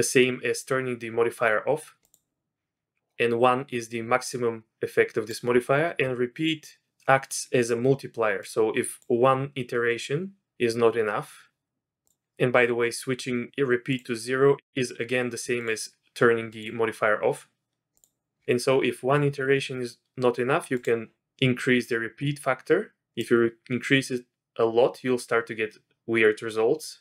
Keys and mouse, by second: 2.0 click, 3.0-5.4 drag, 8.5 click, 15.6 click, 16.5 click, 23.2-27.0 drag.